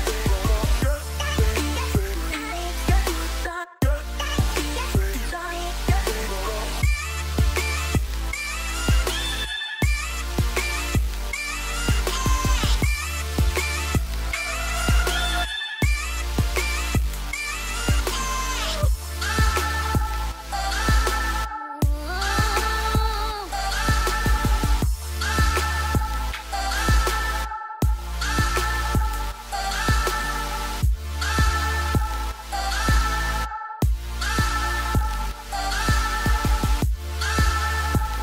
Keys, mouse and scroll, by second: 4.5 right click, 19.2 right click, 27.4 right click, 28.8 right click.